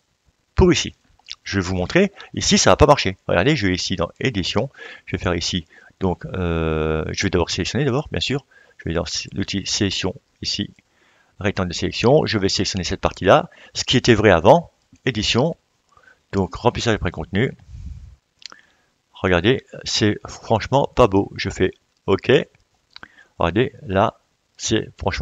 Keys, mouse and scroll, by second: 0.0 click, 0.2-3.4 drag, 5.4-25.2 drag.